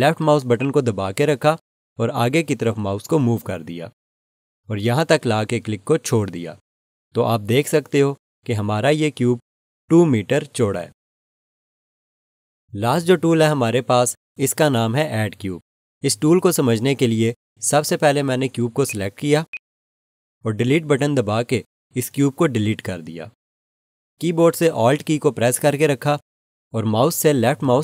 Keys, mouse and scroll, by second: 0.5 click, 18.8 click, 22.7 Delete.